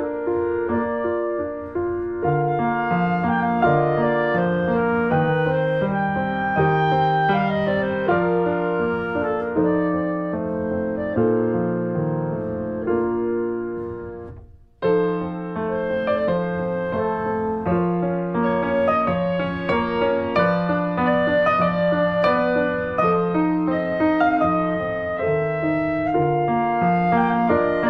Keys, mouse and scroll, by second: 0.3 middle click, 0.8 shift+click, 1.2 middle click, 1.6 shift+click, 1.8 scroll down 1, 2.1 middle click, 2.9 click, 3.5 scroll down 1, 3.7 click, 4.3 middle click, 5.1 ctrl+z, 5.3 scroll up 1, 5.6-7.1 middle drag, 7.1 e, 8.4 click, 9.0-9.4 scroll up 2, 9.4-10.1 scroll down 1, 10.1-12.5 drag, 12.5 scroll down 2, 12.7 middle click, 12.9-13.6 scroll up 2, 13.1 shift+middle click, 13.6 right click, 14.1 middle click, 14.6 click, 15.2 middle click, 15.6 click, 16.0 middle click, 16.5 click, 17.0 scroll down 2, 17.2 middle click, 17.4-18.4 scroll up 3, 18.0 middle click, 18.4 click, 19.2 middle click, 19.5 scroll down 2, 19.7 shift+middle click, 20.1 scroll up 1, 21.6-23.1 drag, 23.1 middle click, 23.2-23.6 scroll up 2, 23.4 shift+middle click, 23.6 middle click, 24.2 scroll down 1, 24.4 middle click, 24.5 scroll up 1, 24.9 click, 25.6-27.0 middle drag, 27.0 click, 27.2 middle click, 27.3 scroll up 1, 27.6 middle click.